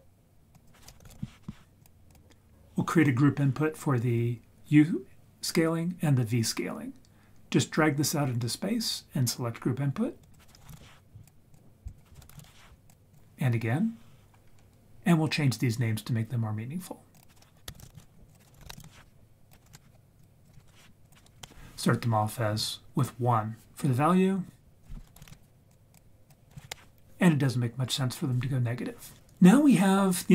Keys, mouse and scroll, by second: 0.5-2.1 drag, 10.2-11.5 drag, 11.8-13.1 drag, 14.5-17.1 scroll down 1, 17.2 click, 18.3 click, 19.5 click, 20.4 click, 20.8 scroll up 1, 21.0 click, 24.8 click, 25.7 click, 26.2 click.